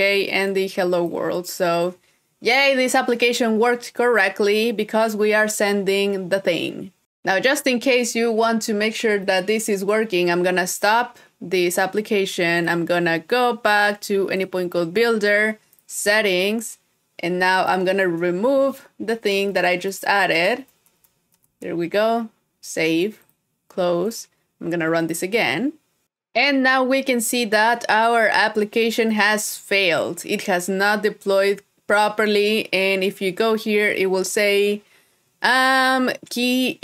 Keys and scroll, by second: 18.3 super+Tab, 21.8 super+s.